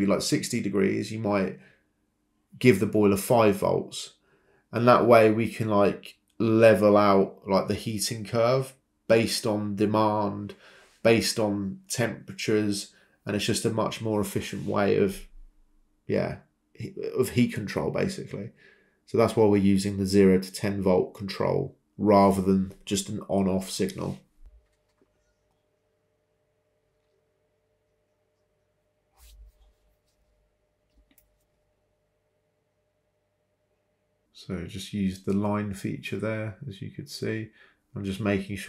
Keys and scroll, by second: 0.4 c, 1.1 Return, 5.0 Escape, 12.0-13.2 typing, 17.6-21.3 typing, 25.6 typing, 26.9 a, 27.4 BackSpace, 29.4-30.4 typing, 31.1 Escape, 35.3 Escape, 37.1-37.5 typing.